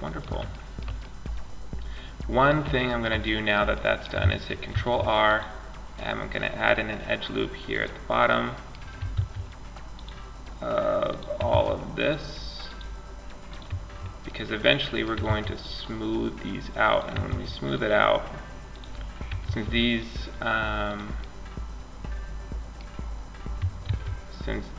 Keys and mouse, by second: 3.9 ctrl+r, 7.5 middle click, 8.3 ctrl+r, 10.7 ctrl+r, 14.5 ctrl+r, 16.5 ctrl+r, 18.6 ctrl+r, 19.8 click, 20.4 click, 21.1 click, 21.2 middle click, 21.4 click, 21.4 middle click, 23.1 ctrl+r.